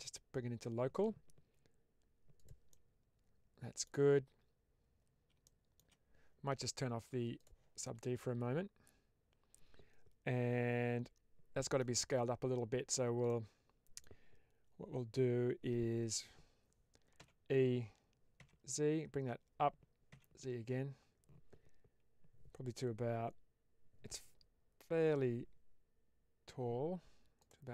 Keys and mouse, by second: 2.2 click, 2.6-3.7 middle drag, 5.3 shift+middle click, 7.3 click, 7.7-11.7 middle drag, 13.2 middle click, 17.1 e, 18.6 z, 20.0 z, 27.3 click.